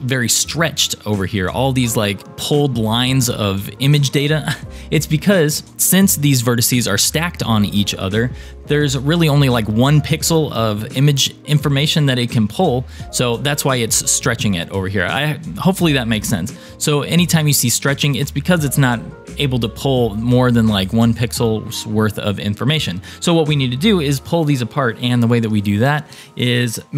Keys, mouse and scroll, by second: 15.0-16.1 scroll down 4, 16.1-16.9 scroll down 2, 22.2-25.3 scroll down 1.